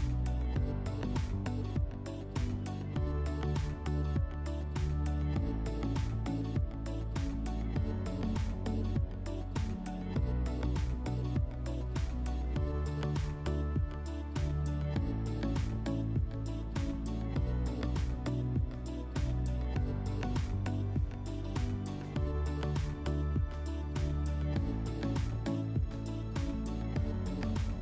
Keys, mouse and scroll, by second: 2.9-4.4 drag, 4.9-6.4 drag, 9.7-11.2 drag, 15.5 click, 21.1 click, 22.4 click, 23.4 click, 25.4 click, 26.6 click.